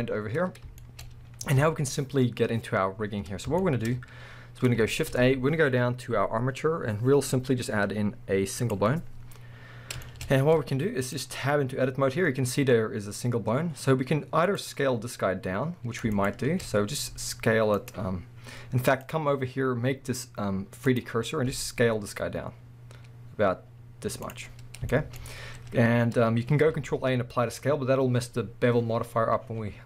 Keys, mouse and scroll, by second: 0.4-0.8 scroll up 2, 0.8-4.9 shift+middle drag, 1.1-3.6 scroll up 2, 4.0-4.9 scroll up 2, 4.9 shift+a, 9.1 scroll down 1, 10.1 shift+middle click, 10.3 scroll up 1, 10.5 z, 11.4-12.4 scroll up 2, 11.6-14.5 middle drag, 12.4-14.5 scroll down 2, 14.5 click, 14.9 scroll down 1, 15.5-16.1 scroll up 1, 16.1 shift+click, 16.7 scroll up 1, 17.1 s, 17.9 right click, 18.9-24.3 drag, 21.5 s, 24.4 scroll up 1, 24.9 shift+middle click, 26.2 scroll up 1, 26.7 ctrl+a.